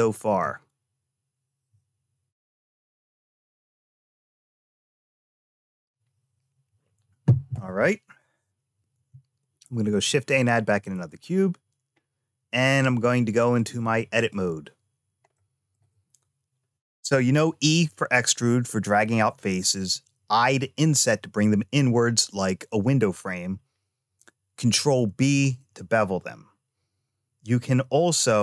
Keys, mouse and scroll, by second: 9.7 shift+a, 13.3 click, 15.2 shift+middle click.